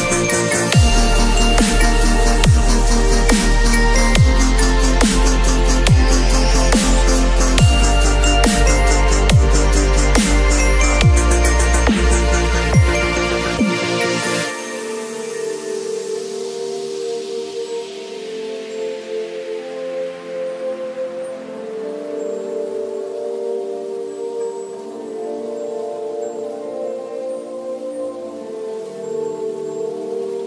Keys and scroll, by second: 6.9 ctrl+u, 10.4 Return, 12.0 space, 13.4 ctrl+a, 13.6 ctrl+c, 13.9 ctrl+w, 14.1 ctrl+v, 14.4 ctrl+t, 23.7 b, 29.6 v, 30.2 space.